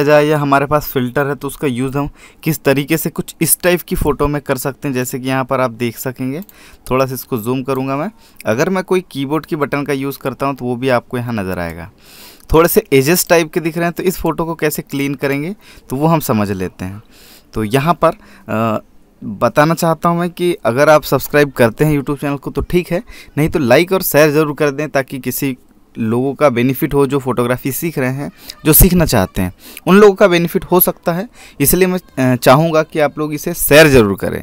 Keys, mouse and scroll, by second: 9.5-9.9 scroll up 1, 10.9 click, 13.1-14.1 scroll down 1, 14.1 click, 15.7 right click, 16.1 click.